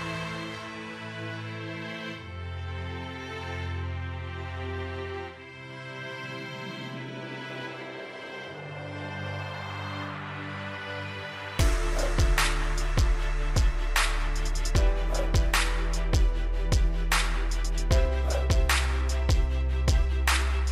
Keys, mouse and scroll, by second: 6.6-10.9 middle drag, 13.0-13.6 scroll down 1, 13.6-14.5 scroll up 1, 14.5-15.3 scroll down 1, 15.3-16.3 scroll up 1, 16.3-18.9 middle drag, 19.3-20.0 scroll down 1, 20.0 click.